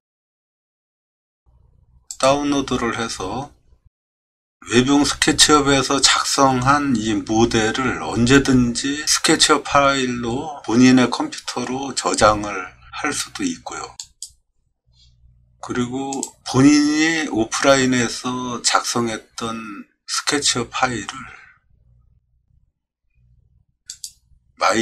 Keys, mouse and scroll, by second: 14.0 click.